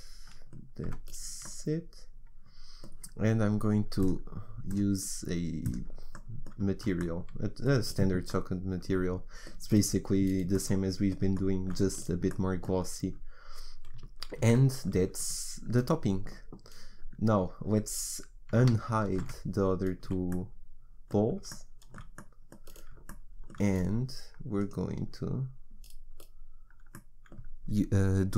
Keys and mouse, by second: 0.9 Tab, 6.2 middle click, 12.5-14.4 middle drag, 14.4 ctrl+s, 19.2 alt+h, 20.1 a, 25.1-27.0 drag.